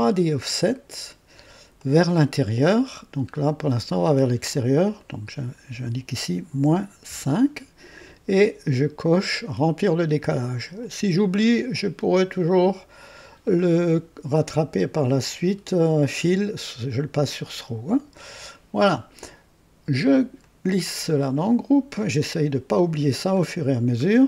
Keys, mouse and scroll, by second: 1.7-2.9 drag, 3.3 scroll up 2, 4.9 click, 6.4 -, 7.0 KP_5, 10.7 click, 12.3 click, 13.6 scroll down 1, 14.9 click, 15.5-15.8 scroll down 1, 17.8 click, 20.4-21.6 drag, 23.1 click, 23.7-24.0 scroll down 1.